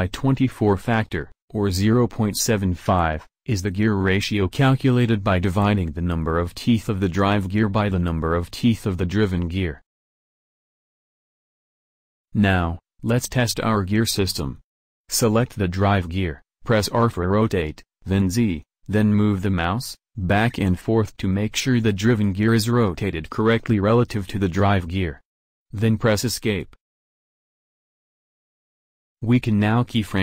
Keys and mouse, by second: 16.3-18.1 drag, 18.3 r, 25.0 r.